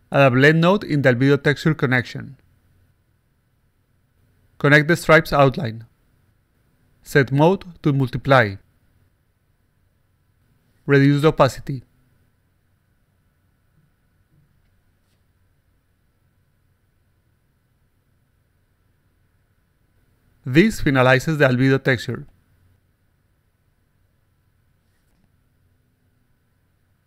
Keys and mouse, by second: 0.2 click, 0.9-1.9 drag, 2.2 click, 3.1 click, 4.7-5.8 drag, 7.1 click, 8.3 click, 9.1 click, 11.1 click, 12.1 click, 13.9 click, 15.5-16.9 alt+drag, 17.5-18.8 alt+drag, 19.1 click, 19.2 click, 19.4 x, 19.8 click, 20.1 click, 20.3 click, 21.3-22.4 alt+drag, 23.3 click, 23.6 click, 24.2 click, 25.5 click, 25.9 click, 26.6 click.